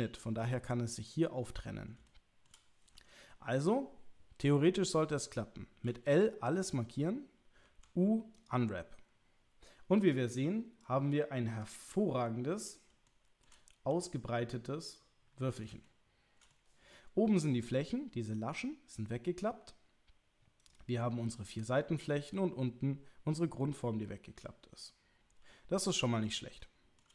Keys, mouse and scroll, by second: 2.0 shift+middle click, 5.9 l, 7.6 u, 10.0 click, 10.9-11.7 drag, 13.0 shift+middle click, 13.9 g, 15.8 shift+middle click, 20.7 click, 26.6 shift+middle click.